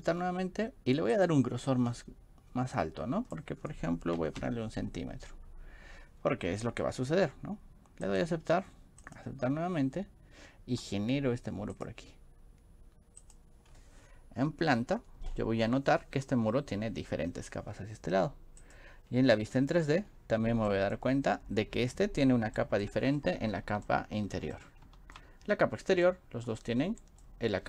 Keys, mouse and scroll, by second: 1.1 click, 1.7 click, 8.2 click, 9.1 click, 11.8 click, 13.2 click, 13.7-14.6 scroll up 4, 15.3-15.9 scroll up 3, 18.7 click, 19.8 middle click, 20.1 scroll up 2, 20.1-20.5 middle drag, 20.7 middle click, 22.6 scroll up 2, 22.7 middle click, 23.0-23.4 scroll down 2, 24.0 shift+middle click, 24.5 middle click, 26.1-27.2 shift+middle drag.